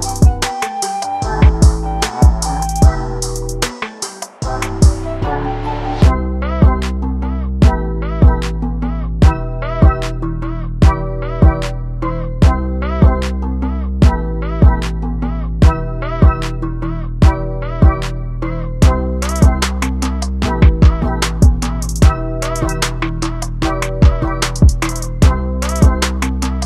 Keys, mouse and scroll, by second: 1.6 click, 2.9 r, 10.1 alt+d, 19.5 click, 20.1 x.